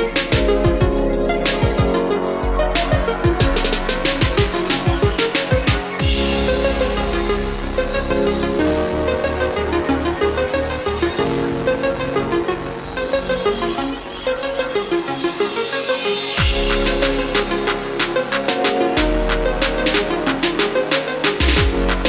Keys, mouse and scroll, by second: 0.8-20.8 drag.